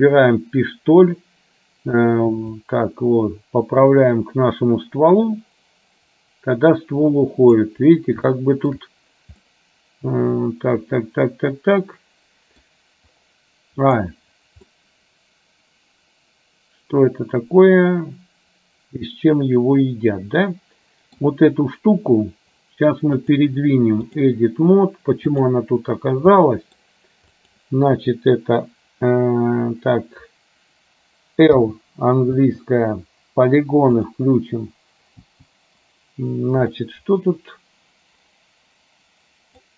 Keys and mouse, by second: 2.7-7.6 drag, 8.5 shift+middle click, 9.5-12.7 middle drag, 14.0 click, 14.8-21.3 middle drag, 23.2-24.3 drag, 25.5 click, 26.6 middle click, 32.5 l, 34.1 click, 36.8-39.7 middle drag.